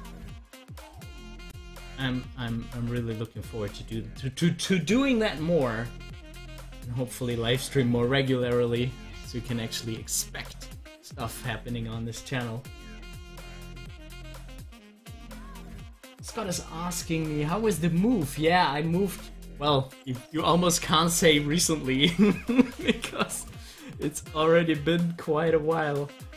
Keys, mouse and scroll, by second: 0.5 scroll down 1, 7.6 click, 20.7 scroll down 1, 23.6 click.